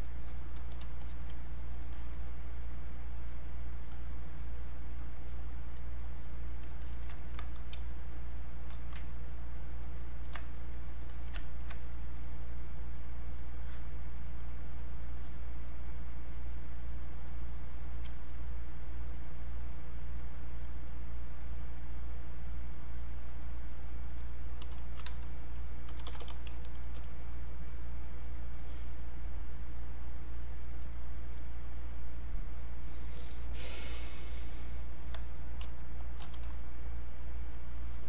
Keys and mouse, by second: 2.0-6.8 alt+drag, 7.2 ctrl+right click, 7.7 space, 8.1 click, 8.3 space, 9.8 ctrl+shift+click, 11.1 alt+click, 11.4 ctrl+right click, 11.8-13.6 ctrl+drag, 20.2 click, 22.3 click, 28.2 click, 34.2 click, 37.5 click.